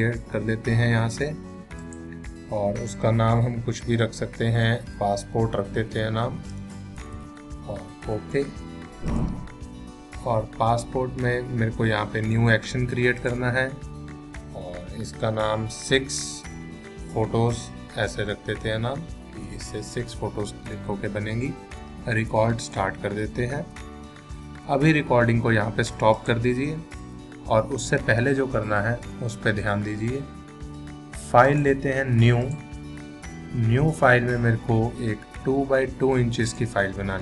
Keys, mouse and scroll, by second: 4.9-8.6 typing, 9.1 click, 13.2 click, 15.5-19.9 typing, 22.6 click, 26.1 click, 31.5 click, 36.5 click.